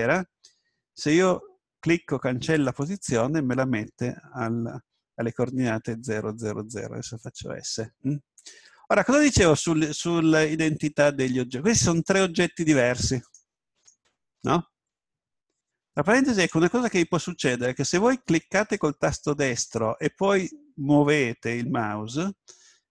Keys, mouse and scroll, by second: 5.7 s, 7.4-10.7 drag, 10.0-12.8 middle drag, 12.8-16.1 right drag, 20.2 right click.